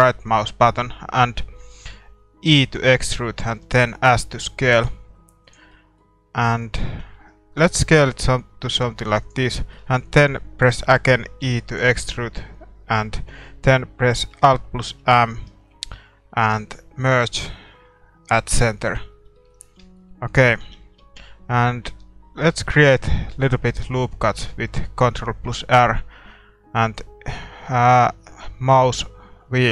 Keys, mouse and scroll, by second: 2.5 e, 3.5 s, 5.7-8.1 middle drag, 7.0 s, 9.6-11.4 middle drag, 11.4 e, 19.1 scroll up 1, 19.3-22.3 middle drag, 20.6 a, 21.5 ctrl+r.